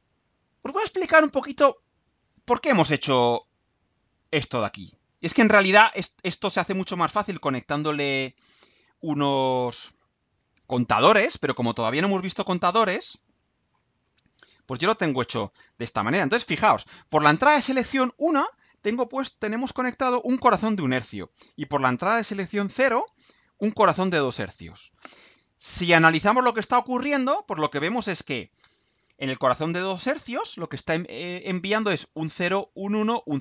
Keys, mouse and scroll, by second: 5.5 click, 9.3 click, 13.1 click, 13.7-14.3 scroll down 4, 14.6 scroll down 2.